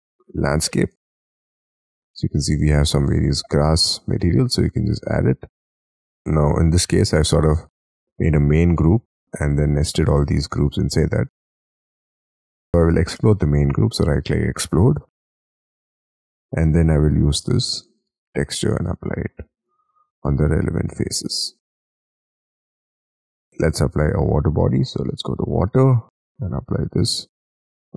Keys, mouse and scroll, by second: 3.7 middle click, 4.9 scroll down 5, 5.2 space, 5.8 ctrl+z, 5.9 double click, 6.3 scroll down 3, 6.6 Escape, 8.9 double click, 9.2 double click, 9.6 double click, 10.7 double click, 11.1 Escape, 12.0 Escape, 12.2 Escape, 13.1 right click, 18.3-19.0 scroll down 2, 19.0 scroll down 2, 19.2 middle click, 20.1-21.2 scroll up 8, 21.2-21.9 scroll down 5, 21.9 space, 22.8-25.2 scroll down 1, 27.5 middle click.